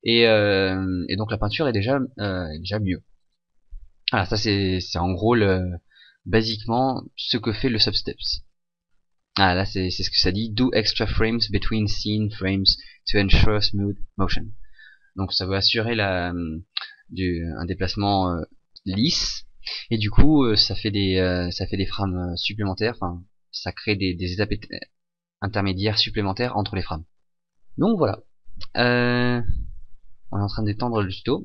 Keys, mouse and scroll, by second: 4.7 right click, 6.6 Escape, 30.9-31.4 scroll down 2.